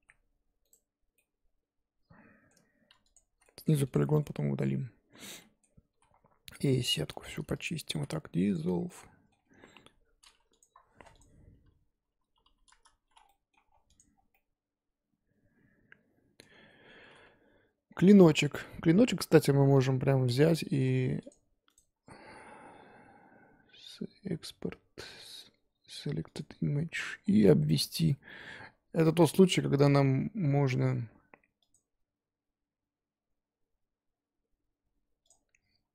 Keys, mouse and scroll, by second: 1.2-3.1 middle drag, 3.1 alt+shift+click, 3.4 middle click, 3.8 alt+shift+click, 4.2-5.9 middle drag, 5.9 s, 7.6 alt+click, 8.5 x, 8.8 scroll down 4, 8.9 middle click, 9.4 Tab, 12.7 click, 13.1-14.3 scroll down 8, 13.3 middle click, 13.9 click, 14.3-16.4 middle drag, 16.4 scroll down 1, 16.5-17.8 scroll up 1.